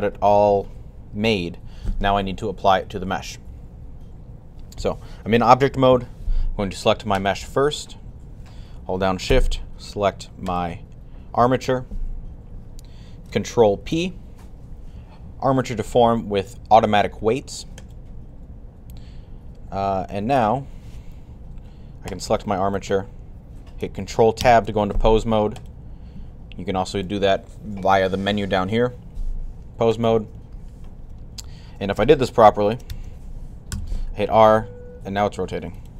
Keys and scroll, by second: 13.6 ctrl+p, 33.6 r.